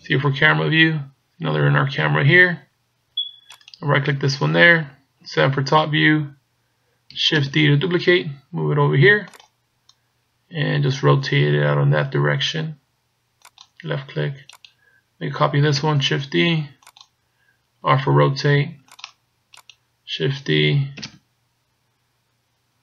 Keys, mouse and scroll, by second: 0.0 KP_0, 3.7 right click, 5.2 KP_7, 7.4 shift+d, 9.5 click, 11.4 r, 14.6 right click, 15.9 shift+d, 18.1 r, 19.5 right click, 21.1 shift+d.